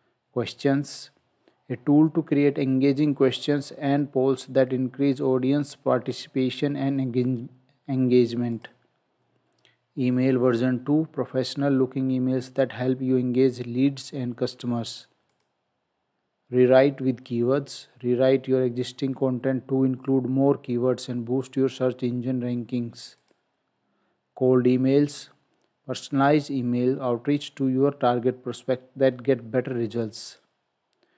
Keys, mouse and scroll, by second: 8.6 click, 15.3 click, 23.2 click, 30.3 click.